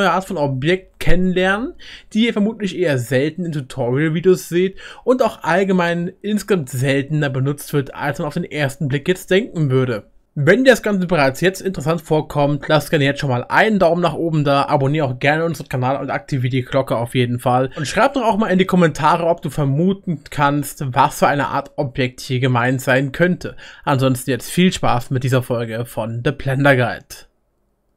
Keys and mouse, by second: 24.9 middle click, 25.1 right click, 25.4 middle click, 25.9 right click.